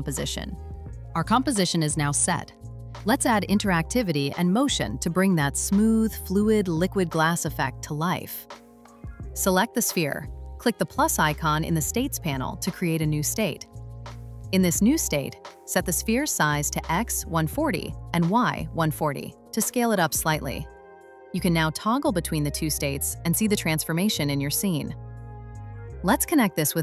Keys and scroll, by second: 18.0 0, 18.6 Return, 20.2 0, 20.4 Return.